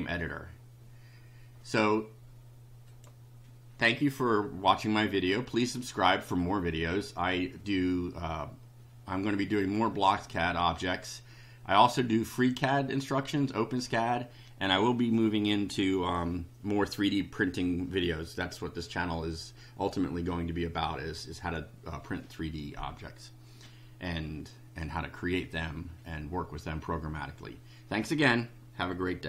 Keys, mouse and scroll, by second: 2.9 click.